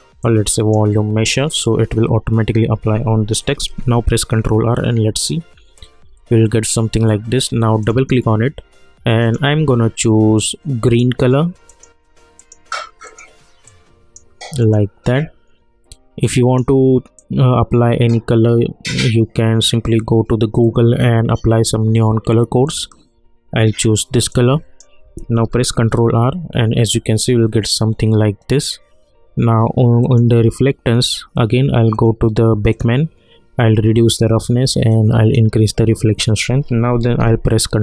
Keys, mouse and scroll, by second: 3.6 ctrl+r, 7.8-25.4 drag, 25.4 ctrl+r, 30.0-37.0 drag, 37.0 ctrl+r.